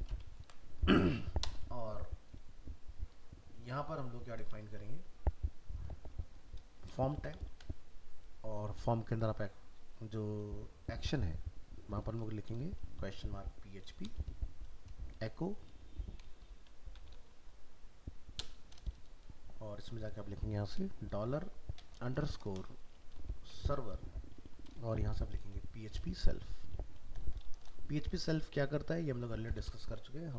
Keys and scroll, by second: 0.4 ctrl+s.